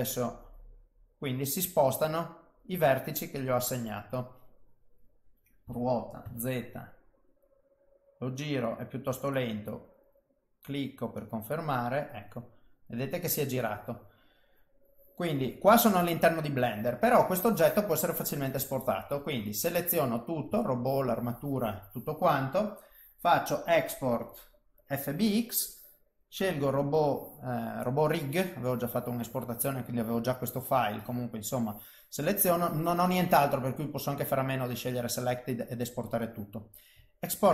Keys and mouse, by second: 4.2 middle click, 5.6 r, 12.0 middle click, 13.4 middle click, 15.9 middle click, 18.3 click, 19.2 click, 19.6 click, 20.6 shift+click, 23.6 click.